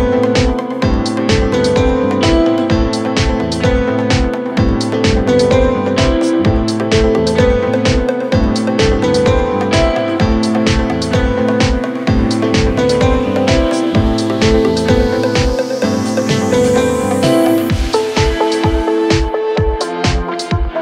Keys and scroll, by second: 12.8 F9.